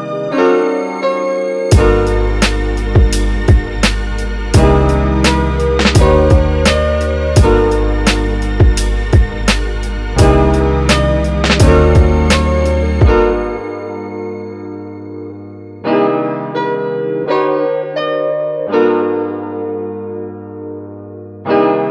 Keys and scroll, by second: 7.1 super+s, 7.6 Right, 7.9 BackSpace, 8.1 5, 8.1 Return, 21.4 super+z.